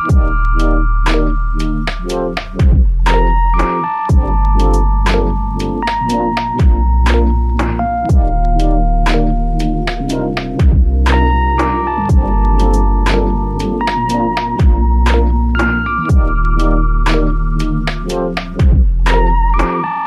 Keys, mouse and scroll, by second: 4.7 shift+click, 11.9 f, 13.4 alt+click, 14.9 double click.